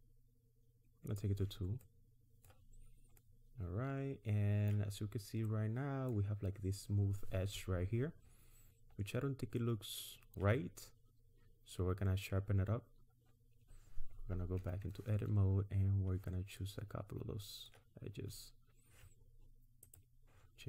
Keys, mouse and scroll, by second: 1.1 click, 1.8 middle click, 2.8-3.7 scroll up 2, 3.2 middle click, 4.9-5.3 scroll down 4, 5.5 middle click, 8.9-9.3 scroll up 2, 9.6 middle click, 10.6 scroll up 1, 12.8-13.3 scroll up 2, 14.6 Tab, 15.5-16.0 scroll up 2, 16.6 middle click, 19.9 click.